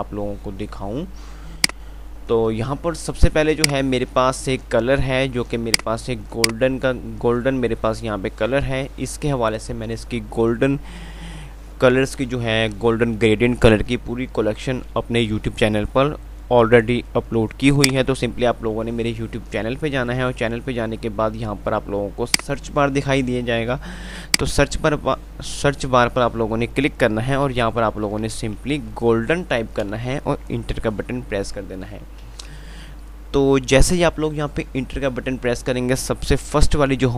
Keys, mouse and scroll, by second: 1.9 click, 2.4 F2, 3.8 click, 3.8 typing, 4.8 F3, 5.7-6.4 typing, 5.9 click, 6.8 click, 7.4 F2, 18.0 click, 32.2 F5.